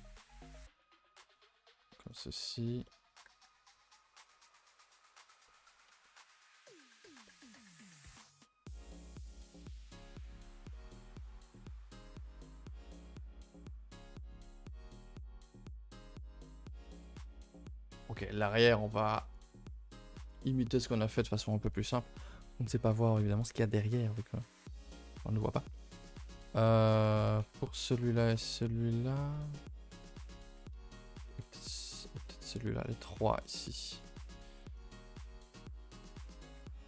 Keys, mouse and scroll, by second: 1.0 scroll down 2, 1.2 middle click, 2.0 click, 2.3 middle click, 2.6 scroll up 2, 2.8 middle click, 3.2 g, 3.9 g, 5.1 click, 5.3 Tab, 5.5-5.9 middle drag, 5.9 Tab, 6.0-6.4 middle drag, 6.4 g, 7.0-7.7 middle drag, 7.7 click, 7.9 g, 8.4-9.8 middle drag, 9.8 click, 9.9 g, 10.3 Tab, 10.5 scroll down 2, 10.7 middle click, 11.6 click, 11.9 a, 12.0 a, 12.1-12.4 middle drag, 12.4 ctrl+s, 12.6-13.2 scroll down 6, 12.7 middle drag, 13.4-14.5 middle drag, 14.5 KP_0, 15.1 scroll down 1, 21.4 click, 27.7 click, 28.1 click, 31.3 click, 32.2 click, 32.8 click, 33.4 click, 33.9 click, 34.3 click, 34.7 click, 36.1 click.